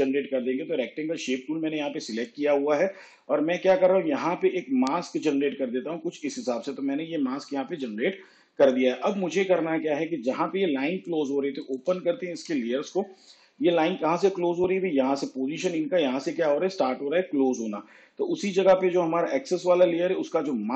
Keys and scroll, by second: 12.4 u.